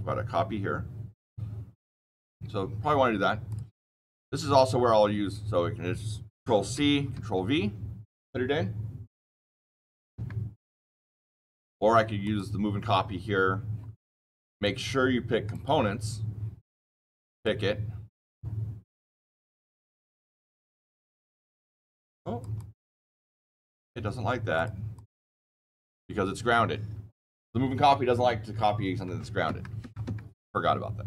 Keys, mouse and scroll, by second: 3.4 click, 6.6 ctrl+c, 7.1 ctrl+v, 10.0 Escape, 11.3 ctrl+z, 12.1 click, 14.5 click, 15.4 click, 17.2 click, 19.0 click, 20.5 click, 21.2 click, 21.7 click, 22.1 click, 22.5 click, 22.9 click, 23.2 click, 23.5 click, 24.5 click, 24.9 click, 29.4 Escape, 29.7 Escape, 30.0 Escape.